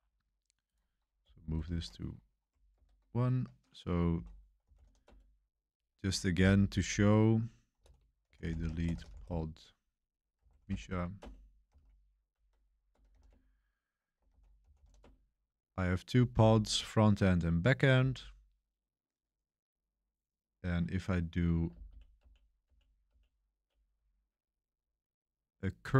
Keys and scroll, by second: 1.5 ctrl+alt+shift+1, 2.3 ctrl+alt+shift+1, 2.7 super+3, 2.7 ctrl+alt+shift+1, 4.1 ctrl+l, 4.3-5.3 typing, 7.7-15.3 typing, 14.2 ctrl+l, 21.7 Page_Up, 21.8 Page_Up, 22.1 Page_Up, 22.6 Page_Up, 23.0 Page_Up.